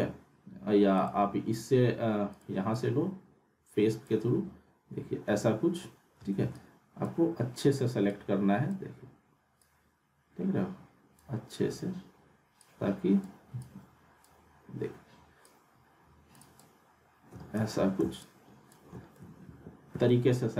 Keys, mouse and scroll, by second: 1.0-4.3 drag, 4.6 scroll up 1, 6.5-7.2 ctrl+drag, 17.0 ctrl+click, 19.4 alt+w.